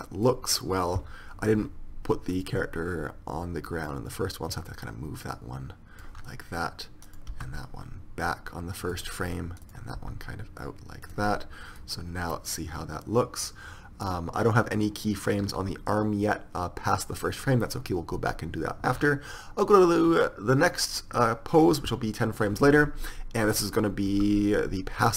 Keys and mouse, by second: 4.1 middle click, 4.5-6.2 drag, 7.3-11.8 drag, 7.6 r, 10.2 r, 23.6-25.1 drag, 24.4 r.